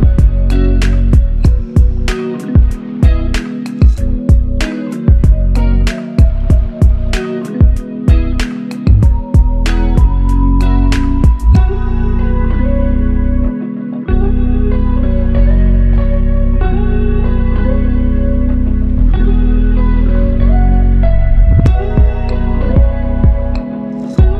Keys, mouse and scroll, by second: 6.8 ctrl+click, 17.2 alt+click, 22.0 typing.